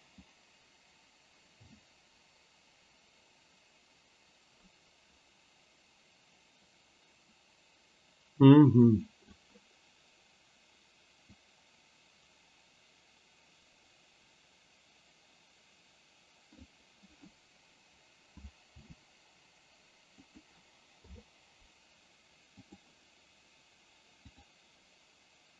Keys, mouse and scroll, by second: 0.3-9.5 drag, 11.5-16.8 drag, 18.7 r, 21.0 i, 24.4 click.